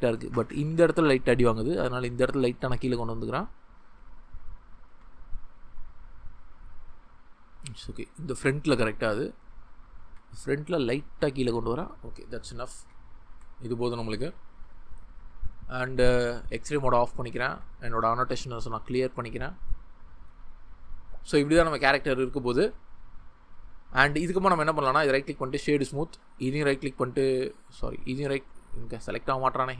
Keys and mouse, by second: 0.5 g, 3.4 click, 3.8 ctrl+z, 4.8 g, 6.4 click, 7.6 ctrl+z, 10.0 g, 10.0 click, 11.5-11.9 drag, 12.3 ctrl+middle click, 13.3 Tab, 15.3 click, 16.6 click, 18.8 click, 19.6-21.8 middle drag, 25.0 right click, 26.7-27.2 drag, 27.7 ctrl+z, 29.6 click.